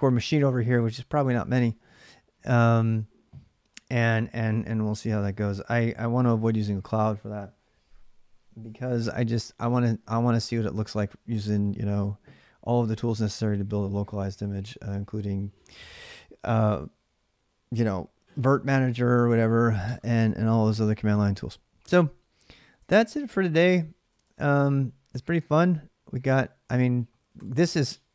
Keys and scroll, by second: 22.6 ctrl+[, 22.6 ctrl+j, 22.9-24.4 typing, 25.1 super+Tab.